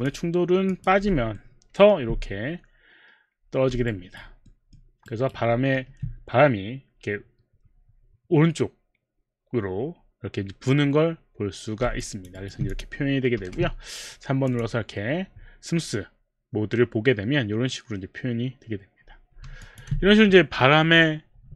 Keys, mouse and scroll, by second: 0.0 click, 1.4 alt+middle click, 4.0 alt+right click, 4.5 alt+middle click, 5.1 alt+right click, 5.6 alt+middle click, 6.4 alt+middle click, 12.0 alt+click, 12.3 alt+right click, 12.6 alt+right click, 12.6 alt+click, 12.9 alt+click, 12.9 alt+right click, 13.4 3, 14.5 click, 19.7 alt+click, 19.8 alt+click.